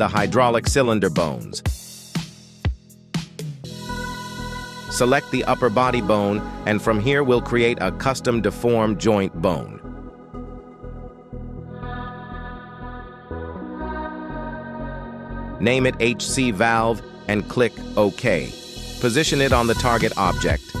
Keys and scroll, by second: 1.5 z, 5.1 g, 5.6 Escape, 10.6-13.1 typing, 17.8 Return, 19.6 g.